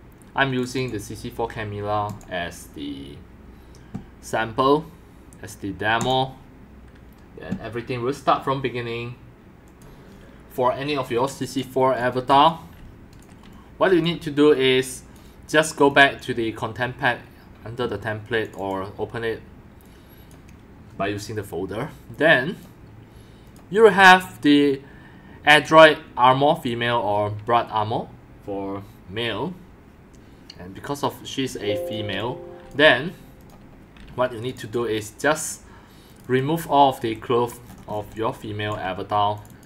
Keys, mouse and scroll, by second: 10.7 click, 11.4 click, 11.7-13.9 typing, 14.6 click, 15.9 click, 18.4 click, 18.5 click, 19.8 click, 22.1 click, 23.5 click, 23.8 click, 24.3 click, 24.7 click, 31.4 x, 31.5 click, 32.2 x, 32.6 c, 35.4 Delete, 37.6 middle click, 38.1-39.1 typing.